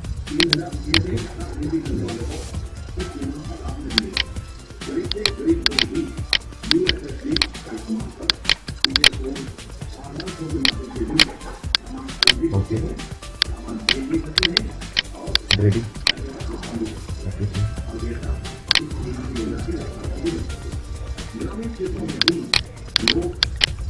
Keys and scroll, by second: 4.0 Delete, 13.7 Delete, 18.7 Delete.